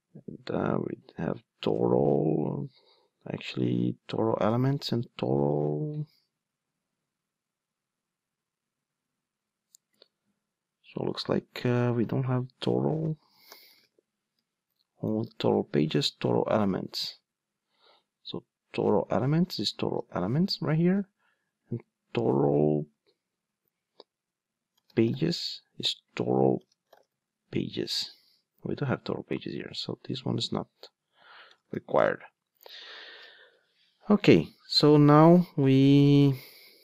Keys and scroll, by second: 1.6 super+c, 19.0 super+c, 19.9 super+v.